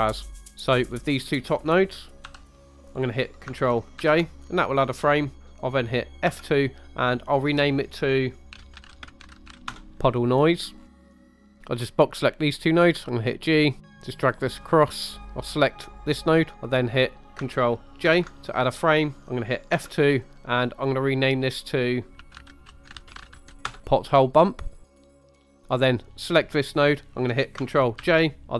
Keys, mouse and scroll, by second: 0.4 scroll up 2, 0.5 middle click, 0.7-1.2 drag, 2.3 g, 2.7 click, 4.0 ctrl+j, 6.3 F2, 8.9 d, 10.8 scroll down 2, 10.9 middle click, 11.0 scroll up 2, 11.1 scroll down 2, 11.2 click, 12.8 g, 13.6 click, 13.8 scroll up 2, 13.9 middle click, 14.0 click, 15.1-16.1 drag, 15.8 middle click, 18.2 ctrl+j, 19.7 F2, 24.8 click, 25.4 click, 25.5 middle click, 25.6 right click, 25.7 click, 28.0 ctrl+j, 28.4 F2.